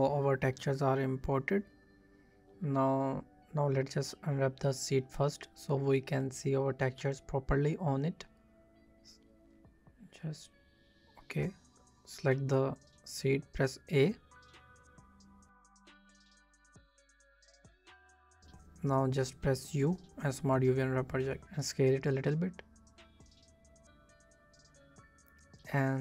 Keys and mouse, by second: 2.8 click, 4.6 click, 5.5 Tab, 6.0 b, 6.2 a, 7.5 click, 9.4 click, 9.7 right click, 11.1 a, 11.7 right click, 12.0 a, 14.5 `, 15.7 z, 18.6 u, 20.9 a, 21.1 s, 21.5 click, 21.8 Tab, 23.6 middle click, 24.9 middle click, 25.2 click, 25.6-26.0 middle drag.